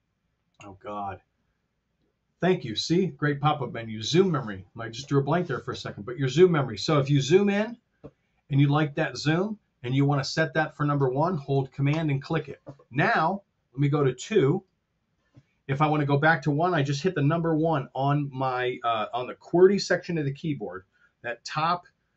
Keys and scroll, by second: 7.3 t, 8.6 t.